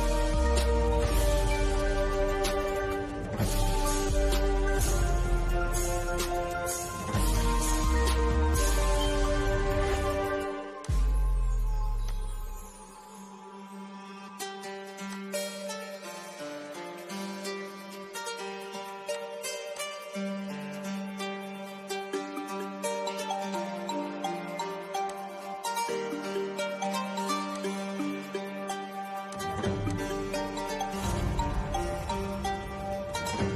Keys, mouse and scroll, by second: 0.8 scroll up 1, 5.7 click, 7.9 scroll up 1, 9.7 click, 14.1 click, 15.5 scroll up 1, 18.0 click, 20.2-20.5 scroll down 1, 22.0 middle click, 22.7-23.1 scroll down 1, 24.0 click, 31.5-31.9 scroll up 1.